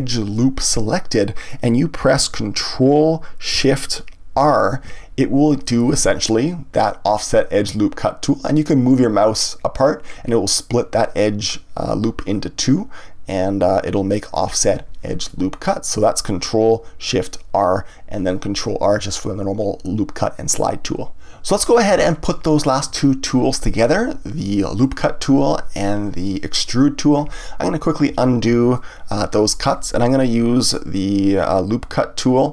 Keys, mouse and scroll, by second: 0.3-3.3 middle drag, 4.3 ctrl+shift+r, 14.4 click, 15.2-18.3 middle drag, 28.1 ctrl+z.